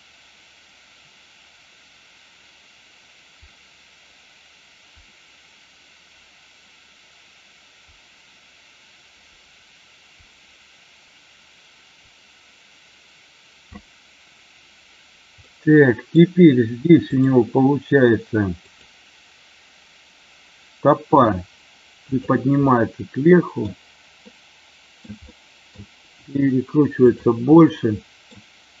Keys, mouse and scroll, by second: 15.5-16.1 middle drag, 17.1 click, 18.7-19.2 drag, 21.1 r, 21.9 click, 22.7 middle click, 24.3 middle click, 25.3-25.7 middle drag, 25.9 r, 26.9 click, 27.6-28.2 middle drag.